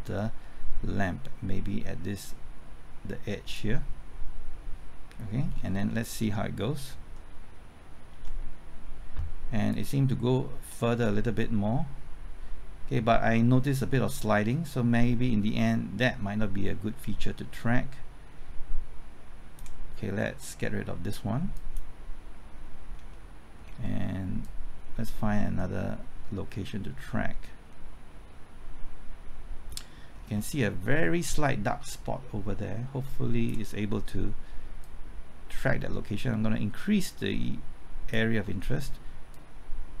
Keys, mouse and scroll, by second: 5.5-7.4 scroll down 1, 8.1 ctrl+t, 9.7-20.3 drag, 22.6-23.1 scroll up 1, 23.1-24.3 middle drag, 24.4-30.1 drag, 30.1-30.6 scroll up 1, 30.6 middle click, 31.1-31.8 scroll up 1, 31.8-38.3 drag, 38.4-39.3 scroll down 1, 39.3-40.0 drag.